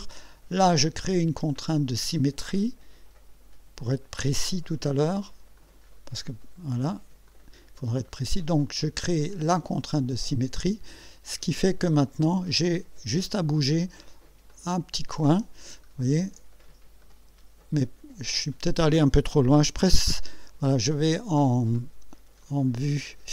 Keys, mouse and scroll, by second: 1.5 click, 5.6 click, 7.3 click, 9.8 click, 12.5-14.0 drag, 14.5 click, 15.8-16.4 ctrl+scroll up 4, 17.0-17.7 right drag, 22.4-23.3 drag.